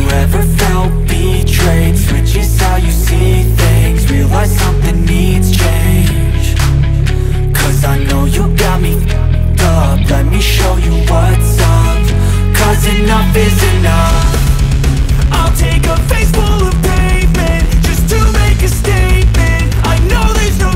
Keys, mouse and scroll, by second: 1.3 click, 2.9 space, 3.0 click, 3.4 space, 4.2 click, 5.6-5.9 alt+scroll down 1, 6.1 space, 6.2-6.8 click, 6.5 space, 6.9-7.6 alt+scroll up 1, 7.9 click, 8.8 alt+scroll down 1, 9.2 space, 9.4-10.3 click, 9.7 space, 11.3 scroll down 2, 11.6 space, 11.8 click, 12.1 space, 12.7 alt+scroll up 1, 13.0 alt+right click, 13.4 click, 15.7 space, 15.8 click, 16.2 space, 16.9 click.